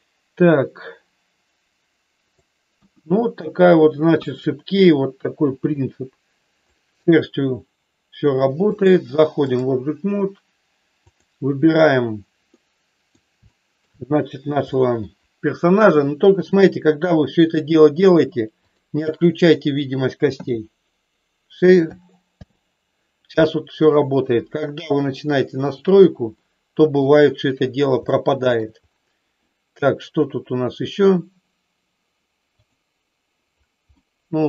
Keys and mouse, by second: 0.4-2.4 drag, 2.7 KP_1, 4.2 KP_1, 5.7-6.7 drag, 8.9 click, 12.5 middle click, 13.4 shift+middle click, 14.8 shift+middle click, 15.9 middle click, 20.3 h, 22.3 alt+h, 25.5 click, 26.4 middle click, 28.0 shift+middle click, 33.9-34.4 middle drag.